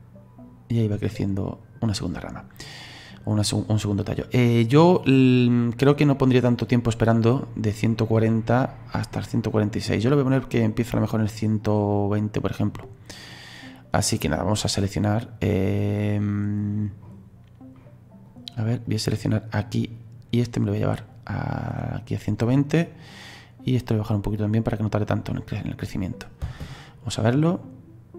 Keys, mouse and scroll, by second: 3.1-9.1 drag, 11.9-13.2 drag, 13.2 right click, 13.7 right click, 15.5 right click, 16.0-18.3 middle drag, 18.3 click, 18.9 right click, 19.1 right click, 20.8 right click, 23.8 right click, 25.7 click, 26.4 space, 26.8-28.1 middle drag.